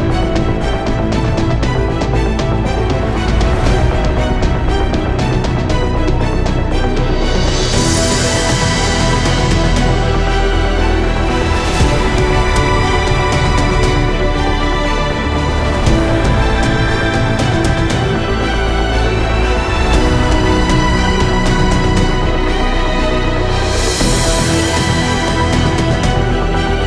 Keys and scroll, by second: 6.4 Return, 9.5-11.2 typing.